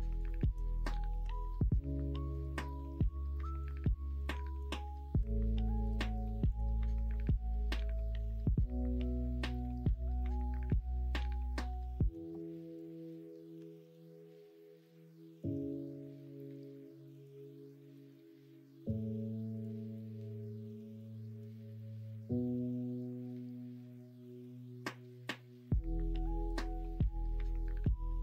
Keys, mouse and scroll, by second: 0.1 shift+click, 1.2 g, 2.9 f, 3.6 click, 4.1 shift+click, 5.2 f, 5.7 click, 6.4 shift+click, 6.9-10.3 middle drag, 10.7-12.1 middle drag, 13.5 f, 14.3 middle click, 15.3 click, 15.7 middle click, 17.1 click, 17.8 shift+click, 18.8 f, 19.5 click, 19.9 middle click, 22.2 f, 22.8 click, 23.1 middle click, 23.9 middle click, 24.5 shift+middle click, 25.3-27.5 middle drag, 27.8 ctrl+r.